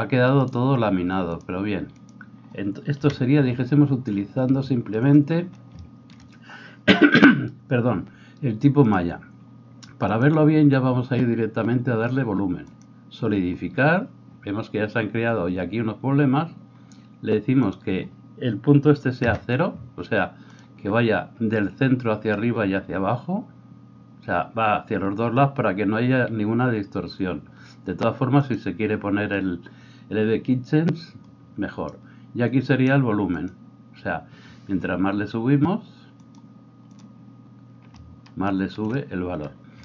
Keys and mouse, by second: 3.0 KP_1, 9.0-10.1 middle drag, 10.1-20.6 drag, 20.6-28.4 middle drag, 28.4 click, 28.8-33.4 middle drag, 33.4-39.8 drag.